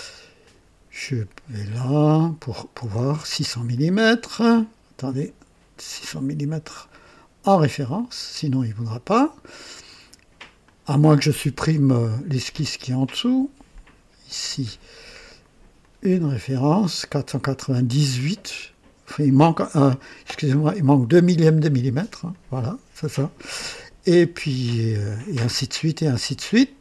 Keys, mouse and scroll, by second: 0.3 click, 1.7 click, 3.6 click, 5.0 click, 6.5 click, 7.8 click, 9.0 click, 10.5 click, 13.6 click, 15.7 click, 22.2 click.